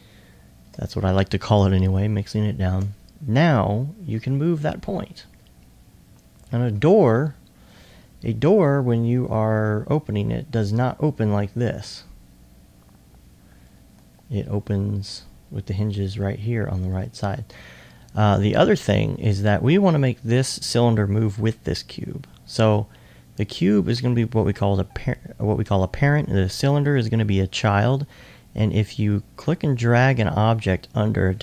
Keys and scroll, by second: 8.3 r.